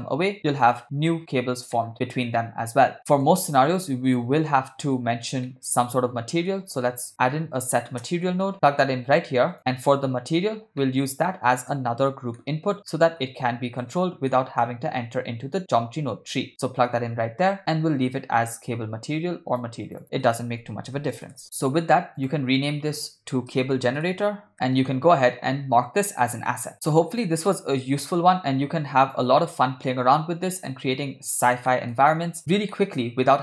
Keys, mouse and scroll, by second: 1.8 middle drag, 2.5-3.3 middle drag, 3.0 click, 3.8-4.2 drag, 5.5-6.4 ctrl+middle drag, 7.0 shift+a, 10.8 ctrl+middle click, 11.3 middle click, 12.4 ctrl+middle click, 13.0 ctrl+middle click, 13.5 ctrl+middle click, 14.3 middle click, 15.8-16.8 drag, 19.2-19.7 drag, 19.9 click, 20.0-21.4 drag, 22.2-24.5 drag, 24.8-26.7 right drag, 26.7 middle click, 27.1 click, 28.7 g, 29.4-31.4 middle drag, 31.7 ctrl+middle drag, 32.7-33.4 shift+middle drag.